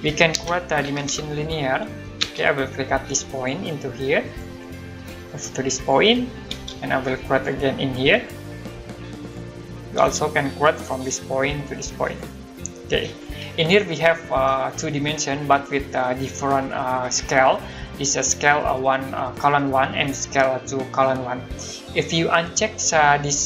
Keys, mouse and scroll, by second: 0.1-2.2 typing, 3.3 click, 6.5 space, 7.3 click, 9.9 space, 10.9 click.